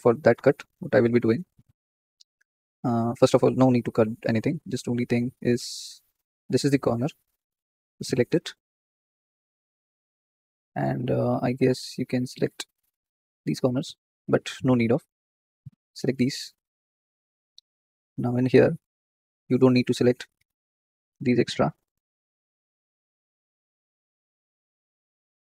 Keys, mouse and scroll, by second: 3.7-7.6 middle drag, 7.6 alt+shift+click, 8.2-10.5 middle drag, 10.5-11.0 scroll up 1, 11.0-14.6 shift+middle drag, 12.0-12.5 scroll up 1, 14.6-15.2 scroll down 3, 15.2-17.3 shift+middle drag, 17.3 alt+shift+click, 17.9-18.3 scroll up 3, 18.3-19.7 shift+middle drag, 19.7 ctrl+click, 19.8-20.1 scroll down 1, 20.1 middle click, 21.0-21.4 scroll up 2, 21.4-23.0 shift+middle drag, 23.0 scroll down 2, 23.3-24.5 shift+middle drag, 24.5 ctrl+click, 24.7-25.5 middle drag.